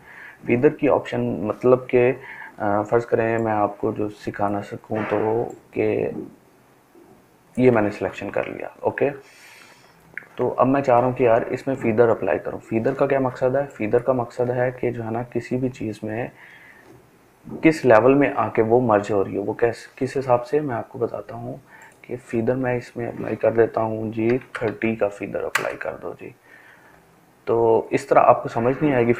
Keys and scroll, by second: 23.0-23.3 typing, 24.4 Return.